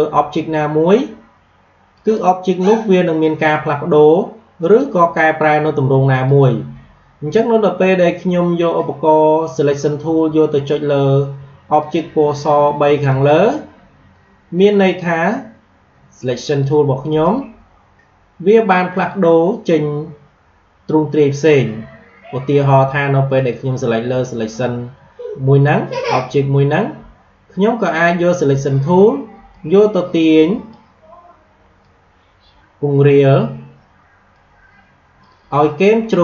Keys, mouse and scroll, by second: 1.8 click, 4.5 click, 11.7 click, 14.5 click, 23.3 click, 29.4-36.2 drag.